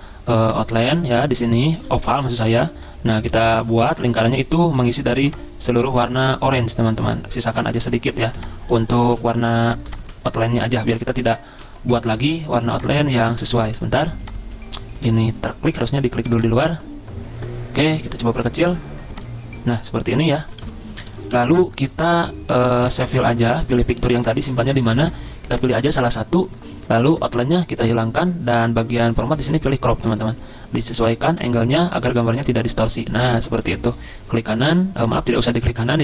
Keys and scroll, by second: 9.2 ctrl+z, 11.5 ctrl+z, 13.7 ctrl+z, 20.3 Down, 20.5 Right, 20.6 Right, 21.0 Down, 21.2 Left.